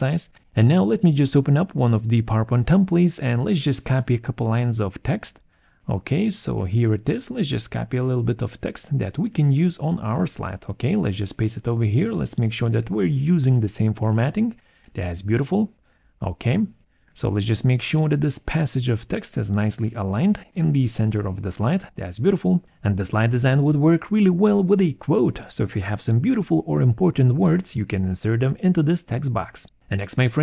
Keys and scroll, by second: 9.4 ctrl+c, 10.8 ctrl+a, 10.9 ctrl+v, 25.3 ctrl+z.